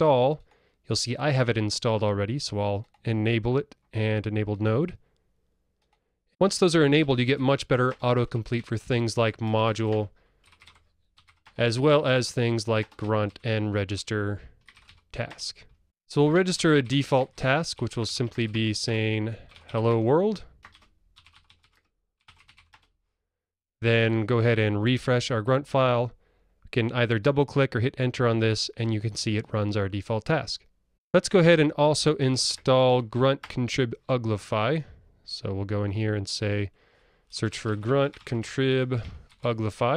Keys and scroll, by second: 8.0 Return, 10.0 Tab, 15.8 alt+Up, 18.8 Tab.